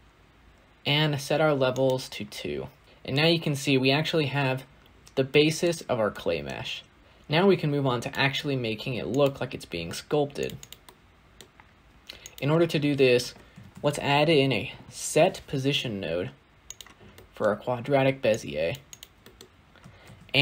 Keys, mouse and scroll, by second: 1.8 click, 2.6 scroll down 3, 2.8 middle click, 3.1-4.1 scroll up 2, 4.1-4.7 scroll up 1, 4.7-6.0 scroll up 1, 15.0 shift+a.